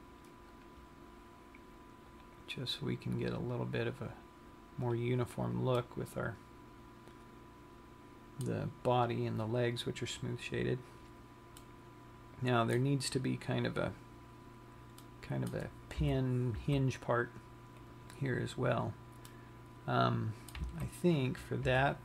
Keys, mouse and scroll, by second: 0.0 click, 1.4 click, 2.7 click, 3.9 click, 5.5 click, 6.5 middle click, 10.0 scroll down 1, 10.7-11.9 scroll up 6, 11.9 middle click, 15.3 middle click, 16.3 KP_3.